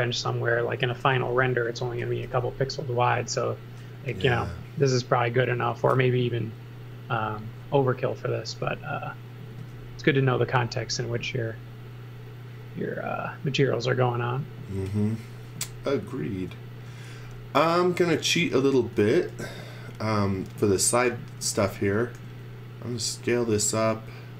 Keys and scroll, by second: 0.6-3.2 typing, 5.8 e, 6.8 e, 9.3-10.2 typing, 16.9 space, 17.9-20.2 typing, 21.4 z, 22.1 s, 23.2 s.